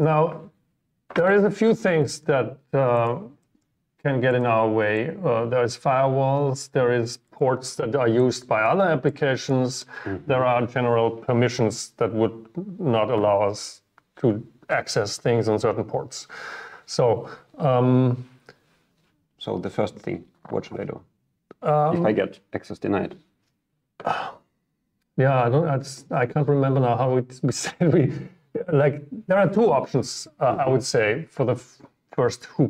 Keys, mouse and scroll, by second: 2.3-3.6 middle drag, 3.8-4.4 middle drag, 4.4-6.3 drag, 9.6 click.